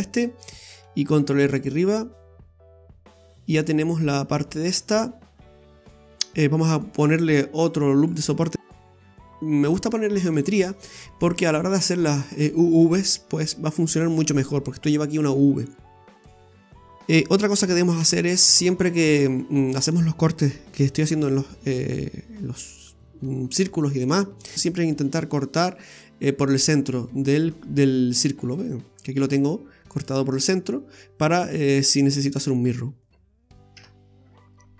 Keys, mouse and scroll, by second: 1.1 ctrl+r, 2.6 scroll down 2, 2.8 middle click, 3.6 middle click, 4.7 scroll up 2, 7.5 click, 8.0 right click, 13.7 scroll up 2, 14.1 middle click, 16.1 scroll down 1, 16.8 middle click, 17.0 shift+right click, 18.0 j, 18.9 right click, 19.7 shift+right click, 21.1 j, 23.3-23.7 scroll down 2, 23.6 middle click, 27.7-29.3 scroll up 3, 29.4 right click, 30.0 shift+right click, 32.3-32.7 scroll down 6, 33.0 middle click, 33.8 Tab.